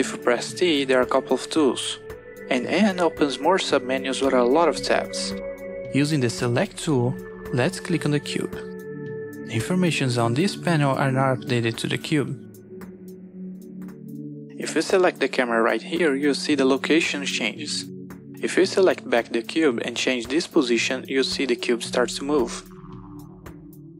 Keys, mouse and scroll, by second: 3.1 n, 5.2 click, 6.1 t, 7.6 click, 9.5 click, 10.5 n, 16.0 click, 19.8 click.